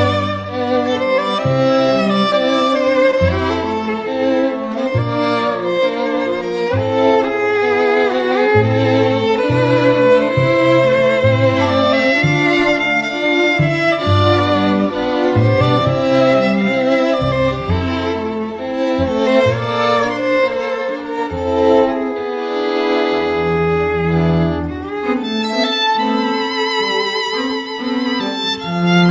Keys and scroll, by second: 9.9-10.9 typing, 12.9 [, 17.9 ], 27.8 ].